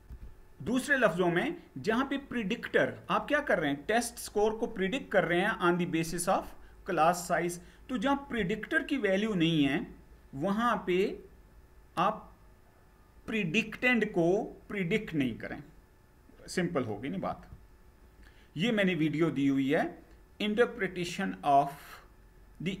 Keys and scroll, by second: 17.0 Down.